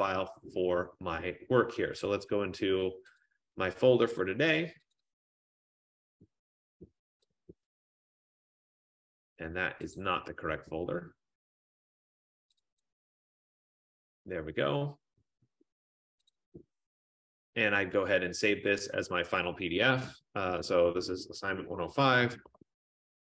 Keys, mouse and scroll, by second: 3.0 click, 3.2 click, 5.1 click, 5.3 click, 7.6 click, 7.8 click, 10.1 click, 11.1-11.4 scroll, 12.6 click, 12.8 click, 15.2 middle click, 16.0 F15, 16.4 click, 16.7 click, 19.4 click, 20.5-23.3 typing.